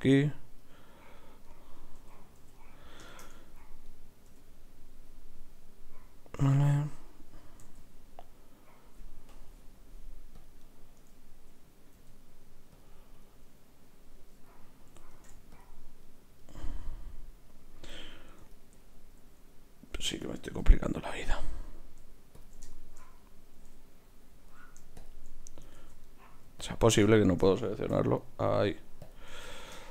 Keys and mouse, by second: 2.0 f, 2.4 f, 3.8-5.1 drag, 4.3 f, 7.6 ctrl+r, 12.0 s, 13.2-14.9 right drag, 15.1 ctrl+Tab, 16.0-18.3 right drag, 18.5-20.4 right drag, 20.4 ctrl+r, 21.3-27.2 right drag, 22.3-24.5 drag, 25.0-27.2 drag, 25.7 ctrl+z, 27.9 f, 28.4 click.